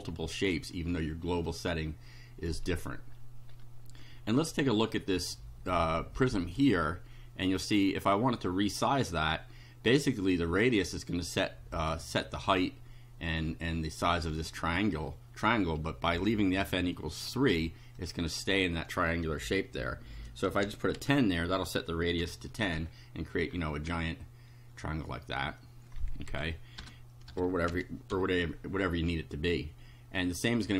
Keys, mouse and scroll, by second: 0.1 shift+right click, 1.5-2.7 right drag, 2.7 scroll down 1, 2.7-4.3 scroll up 5, 7.5 click, 16.6-17.7 drag, 18.0 click, 20.3-21.5 typing, 22.3 F5, 22.9 scroll down 2, 23.5-24.1 scroll down 4, 26.2 Left, 27.2 BackSpace, 27.7 2, 28.1 F5.